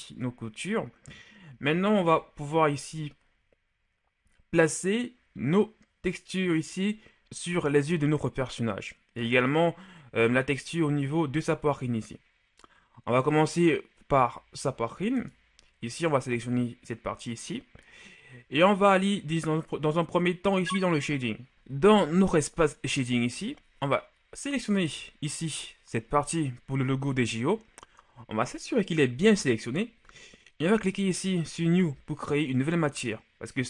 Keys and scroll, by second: 2.5 KP_1, 10.6 KP_Divide.